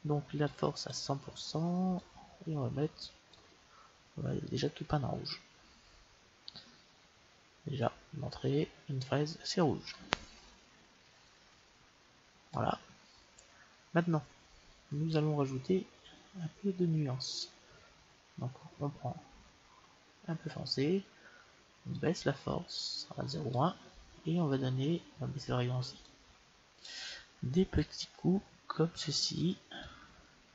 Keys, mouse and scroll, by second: 0.5-3.6 drag, 4.3-6.2 drag, 17.3-19.0 drag, 22.0-23.8 drag, 26.0-29.5 drag, 29.7-30.5 drag.